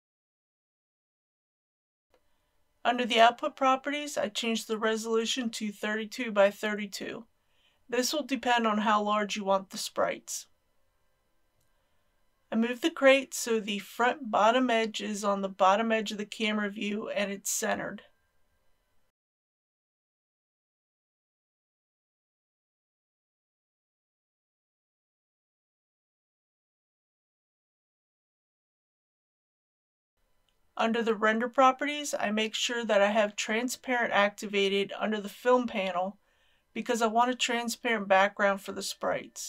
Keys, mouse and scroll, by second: 3.3 click, 3.9 KP_3, 4.1 KP_2, 4.3 Tab, 4.7 KP_3, 4.9 KP_2, 9.5-12.4 drag, 15.0 scroll up 1, 17.3 shift+middle click, 19.1 scroll up 1, 19.4-20.7 shift+middle drag, 20.9 shift+g, 21.4 shift+click, 22.0 shift+g, 23.4 shift+click, 24.6 g, 24.9 x, 26.2 click, 26.6 g, 28.0 shift+click, 32.2 click.